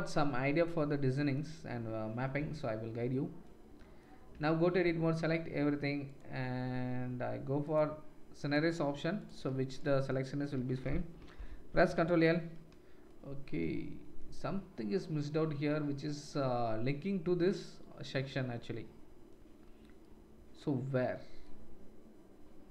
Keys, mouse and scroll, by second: 6.0 middle click, 6.0 right click, 7.7 middle click, 7.9-17.4 drag, 17.4 middle click, 17.5-22.7 drag.